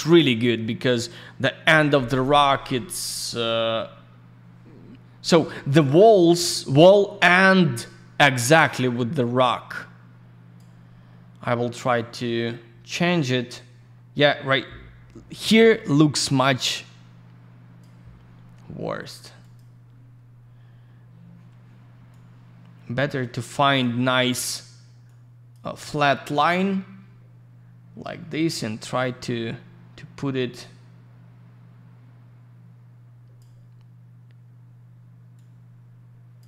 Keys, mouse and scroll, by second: 2.4 scroll down 1, 4.0 scroll down 1, 4.3 scroll up 1, 5.2 middle click, 5.4 middle click, 6.1-6.4 scroll down 1, 7.0 middle click, 8.6 click, 16.6 click, 19.4 click, 19.5 click, 20.5 scroll up 1, 22.1 click, 25.0 click, 28.8 click, 35.3 click.